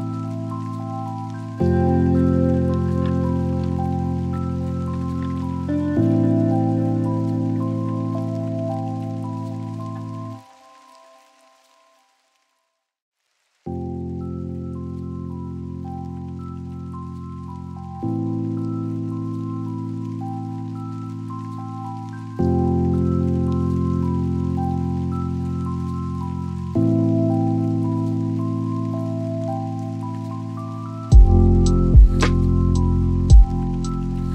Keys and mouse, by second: 6.3 click, 7.7-10.8 drag, 18.9 g, 20.4 y, 27.2 shift+click, 28.9 g, 29.2 y.